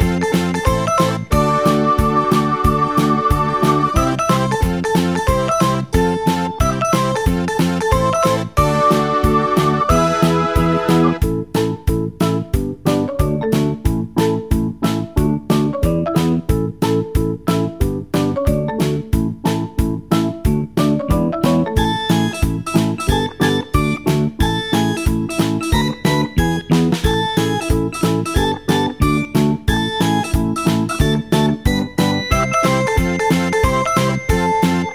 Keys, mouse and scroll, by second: 1.1-2.7 drag, 2.7 KP_0, 9.2 g, 12.8 ctrl+z, 12.9 click, 14.0 click, 14.6 g, 17.8 r, 31.0-33.6 drag, 33.6 KP_0.